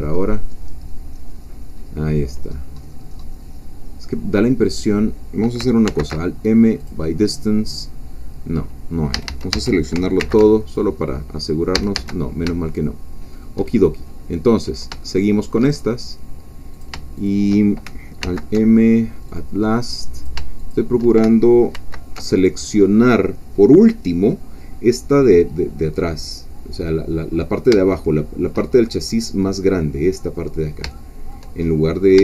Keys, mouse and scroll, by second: 0.3-0.6 scroll down 2, 1.8-2.7 scroll down 2, 2.7-3.7 scroll up 2, 3.7-5.6 scroll down 2, 5.9 alt+m, 6.8 click, 8.4 scroll down 2, 9.1 a, 9.9 alt+a, 10.2 alt+m, 10.7 alt+click, 11.7 a, 12.7 shift+middle click, 14.7 shift+middle click, 15.8-16.1 shift+scroll up 2, 16.8 shift+click, 18.2 alt+m, 19.3 click, 20.3 shift+click, 21.7 alt+m, 22.4 alt+click, 28.0 shift+middle click, 28.7-30.8 shift+scroll down 2, 30.9 shift+middle click, 31.6-32.2 shift+scroll up 1.